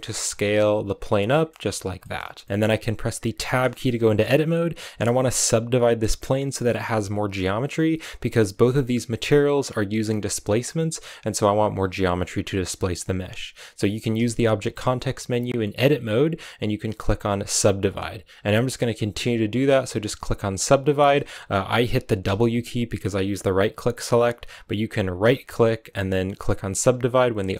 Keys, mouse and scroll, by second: 0.2 g, 0.7 s, 1.2 middle click, 1.5 g, 1.9 middle click, 2.1-2.4 scroll up 1, 2.4 middle click, 3.3 Tab, 3.6 shift+middle click, 3.8 scroll up 1, 3.9-14.0 middle drag, 14.0 w, 18.1 w, 19.4 w, 20.2 w, 22.1 w, 25.4 w.